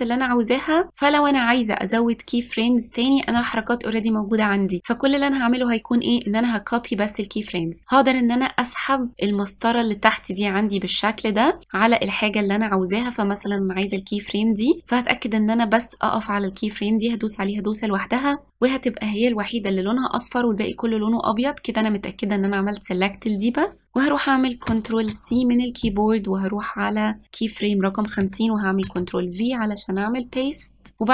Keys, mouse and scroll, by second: 6.0-8.8 drag, 14.6 click, 25.2 ctrl+c, 26.0-28.8 drag, 28.9 ctrl+v, 31.0-31.1 drag.